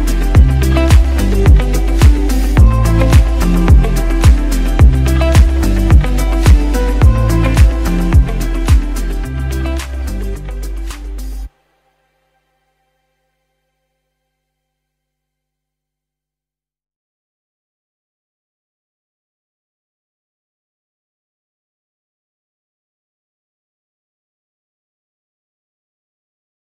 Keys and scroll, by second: 2.4 ctrl+shift+u, 14.1 space, 14.6 space, 16.1 space.